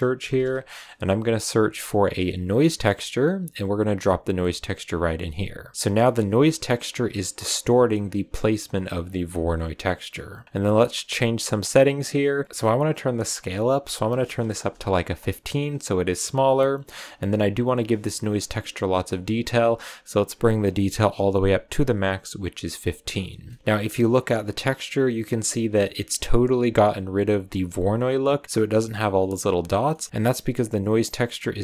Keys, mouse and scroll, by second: 5.3 click, 6.6 click, 9.0 click, 10.0-12.2 scroll up 2, 12.4-14.6 drag, 17.0 click, 20.4-23.0 drag, 23.0-23.3 scroll down 3, 23.4 shift+middle click, 23.6-25.9 scroll up 7, 27.1 click, 29.8 scroll down 1, 29.8 scroll up 1, 29.8 middle drag, 30.1 click.